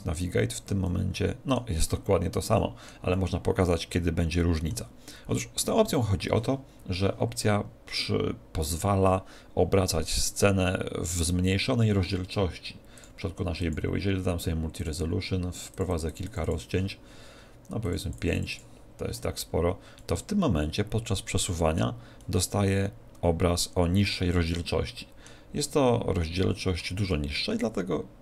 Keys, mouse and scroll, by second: 0.8-4.9 middle drag, 12.9-15.3 drag, 15.7-20.3 drag, 19.9-21.7 middle drag, 22.1-24.0 middle drag, 25.5-28.2 middle drag.